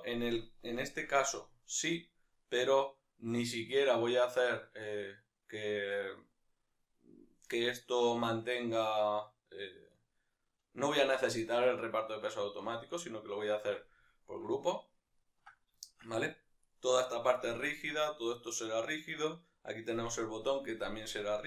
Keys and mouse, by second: 0.1-16.7 middle drag, 16.7-21.4 right drag.